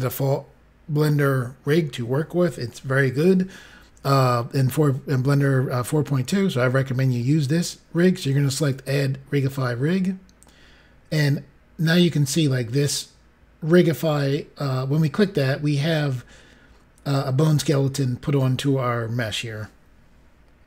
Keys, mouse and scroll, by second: 8.7 click.